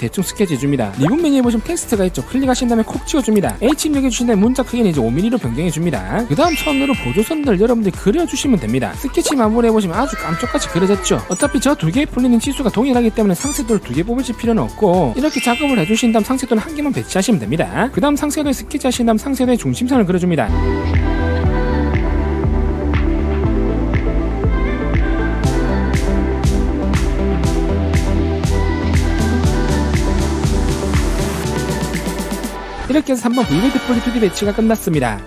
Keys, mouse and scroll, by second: 2.7 click, 4.8 click, 5.6 click, 6.6 click, 7.3 click, 7.7 1, 8.2 click, 9.0 click, 9.2 right click, 10.1 click, 18.2 click, 18.6 click, 19.2 click, 19.4 click, 19.8 click, 19.9 middle click, 20.1 1, 20.6 click, 21.1 click, 21.5 d, 21.7 click, 22.0 click, 22.2 click, 23.3 click, 23.8 1, 24.3 click, 25.1 click, 25.4 d, 25.6 click, 26.7 click, 27.0 click, 27.4 click, 28.2 click, 29.0 click, 29.4 click, 29.5 click, 30.1 click, 30.5 scroll up 2, 30.6-31.1 scroll down 2, 31.1 click, 31.3 click, 31.6 click, 31.9 click, 32.1 click, 32.3 click, 32.5 middle click.